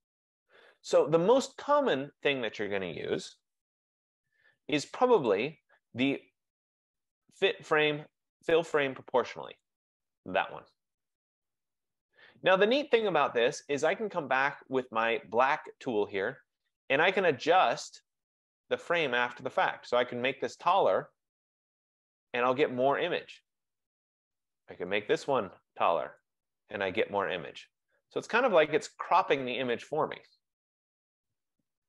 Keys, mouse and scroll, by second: 3.8 ctrl+z, 5.4 right click, 10.2 click, 11.9 F15, 15.8 click, 21.8 click, 26.2 click, 29.8 click.